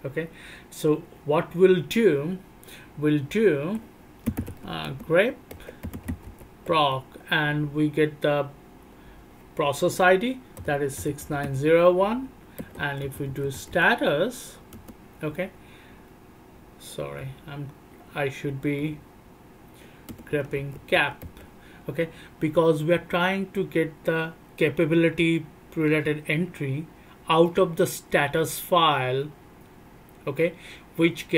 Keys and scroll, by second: 4.2-6.6 typing, 11.2 g, 12.8 g, 13.0 g, 13.5 g, 17.5 alt+o, 17.5-21.2 typing, 17.8 alt+o, 17.9 alt+o, 18.1 alt+o, 18.8 alt+o, 19.1 alt+o.